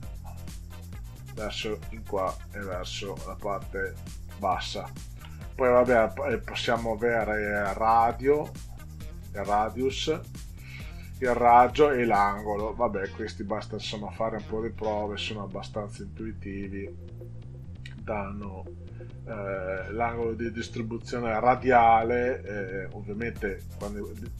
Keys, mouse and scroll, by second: 15.9 click.